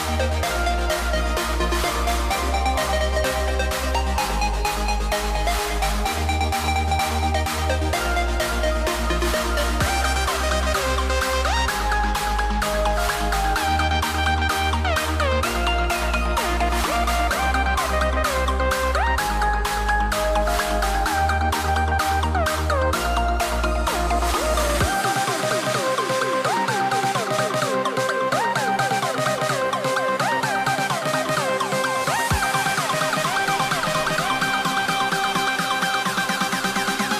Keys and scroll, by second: 1.8 a, 6.8 a, 9.9 a, 12.3 a, 14.2 super+z, 14.4 a, 16.3 a, 17.7 a, 19.5 a, 21.6 v, 26.7 a, 30.0 super+z, 30.1 a, 31.5 a, 31.9 super+z, 32.0 a.